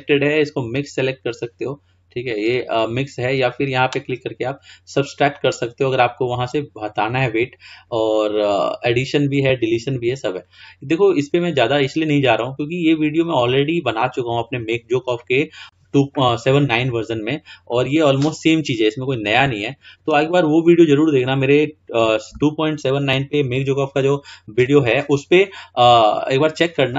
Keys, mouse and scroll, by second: 13.5-14.0 scroll up 2, 14.0-16.5 scroll down 2, 18.1-18.6 scroll up 2, 19.7 shift+middle click, 20.5 scroll up 2, 26.1-26.6 scroll down 3, 26.6 scroll up 2.